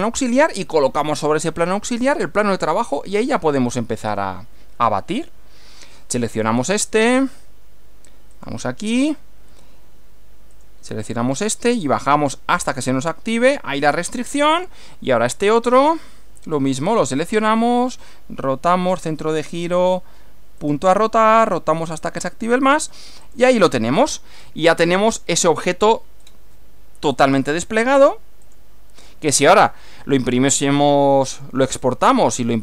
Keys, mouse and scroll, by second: 5.2 click, 6.9 click, 8.3 click, 10.5 click, 13.5 click, 14.4-15.7 middle drag, 16.5 click, 17.8 click, 18.9 click, 20.6 click, 23.2 click, 23.9-24.6 scroll down 2, 25.1-25.9 middle drag, 26.2 click, 27.1 click, 28.5 click, 30.7-31.7 middle drag, 31.7 scroll down 1, 31.7 scroll up 1, 32.3-32.6 middle drag.